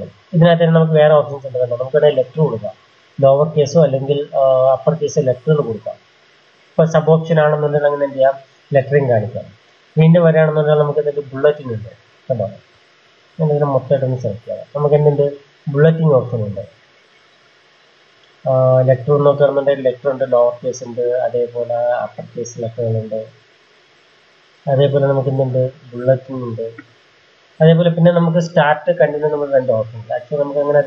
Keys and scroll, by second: 13.1 ctrl+a.